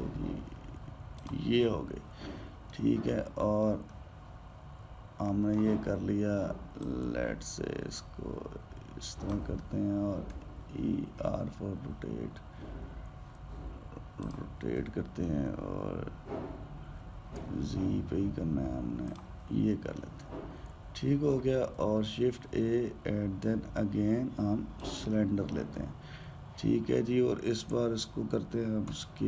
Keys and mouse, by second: 4.7-7.6 middle drag, 7.6 click, 11.1 e, 15.5 g, 20.7-22.8 middle drag, 22.8 shift+a.